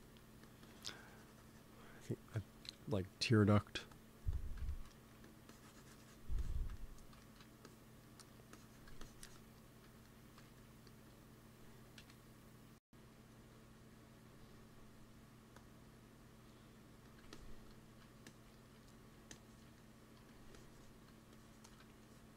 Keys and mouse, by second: 0.2 f, 0.5-2.2 drag, 2.5 KP_1, 4.7-10.9 drag, 5.0 f, 10.1 g, 10.4 f, 11.1-12.7 drag, 11.9 KP_1, 13.2-18.4 drag, 16.9 f, 18.5-20.9 drag, 20.1 f.